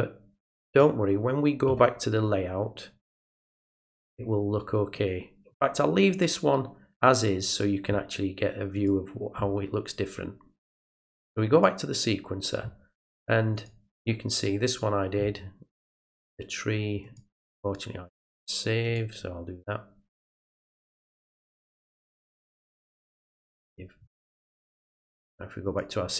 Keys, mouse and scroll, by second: 0.6 click, 4.0 click, 8.7 click, 11.5 click, 13.5 click, 17.0 click, 18.8 click, 20.3 click, 22.8 click, 25.6 click.